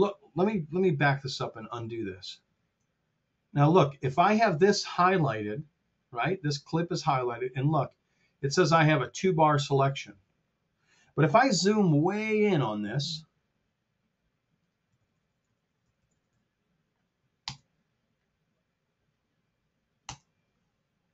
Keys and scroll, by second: 0.9 super+z, 11.5 t, 14.8 t, 17.4 Return, 20.0 Return, 20.7 Return.